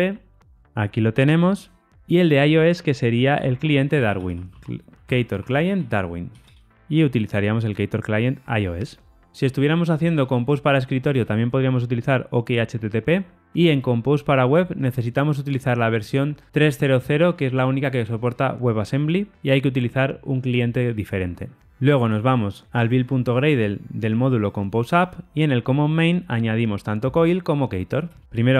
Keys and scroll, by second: 0.5 Tab, 6.7 Tab.